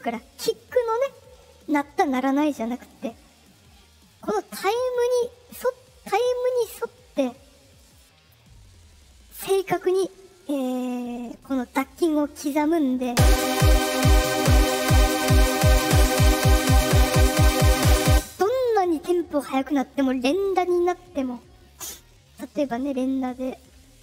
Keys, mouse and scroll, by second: 4.9 click, 5.9-7.9 drag, 8.5 middle click, 8.5-8.8 scroll, 10.9-11.9 drag, 13.0 space, 14.6-17.0 drag, 18.0 space, 22.8 ctrl+click.